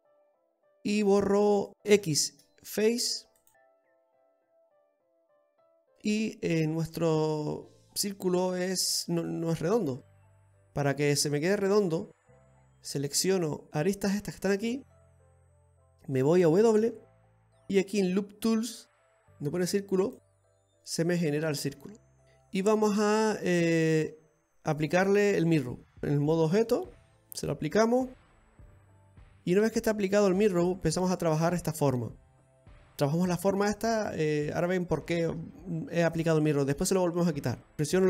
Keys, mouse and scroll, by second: 1.1 click.